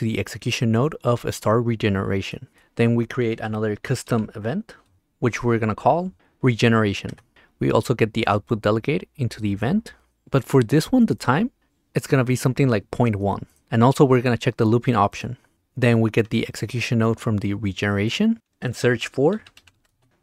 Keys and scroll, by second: 3.8 c, 4.9 s, 5.0 Return, 6.2 n, 7.1 Return, 13.1 1, 19.3-20.2 typing.